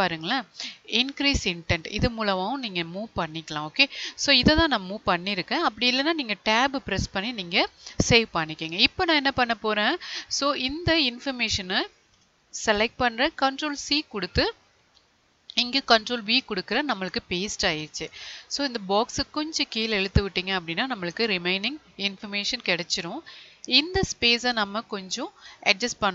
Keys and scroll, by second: 12.9 ctrl+c, 15.4 ctrl+v.